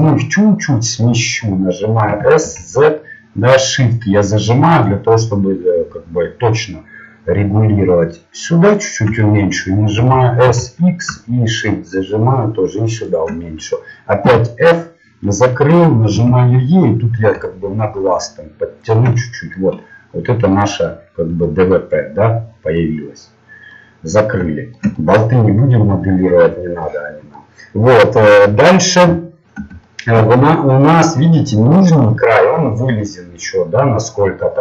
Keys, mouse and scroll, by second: 2.1 s, 10.0 s, 14.2 f, 14.7-16.2 middle drag, 16.1 e, 19.7-22.0 middle drag, 24.2-27.7 middle drag, 29.2 middle click, 34.2 middle click.